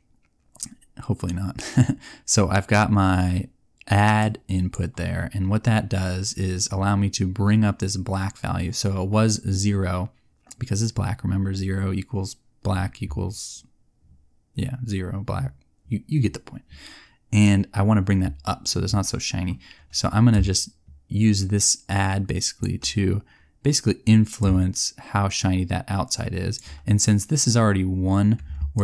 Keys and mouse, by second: 28.7 click.